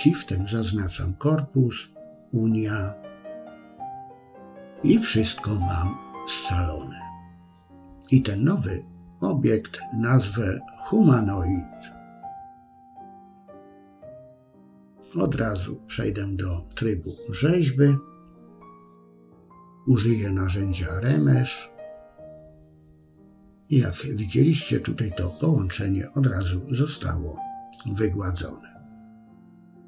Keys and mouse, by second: 0.6 ctrl+shift+b, 7.2-12.4 drag, 14.8 Tab, 20.0-23.3 drag, 23.6 middle click, 25.0 click, 25.6-26.9 middle drag, 27.5 KP_1, 29.0 KP_3.